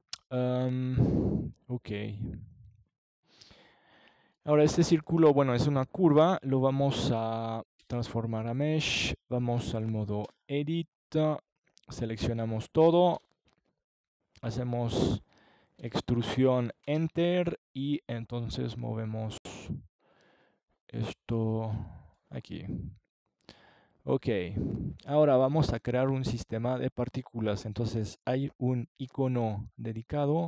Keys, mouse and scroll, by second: 1.5 alt+c, 3.9 Tab, 6.7 a, 9.3 e, 11.6-13.4 drag, 19.6 Tab, 24.8-26.6 drag, 27.6-29.3 drag.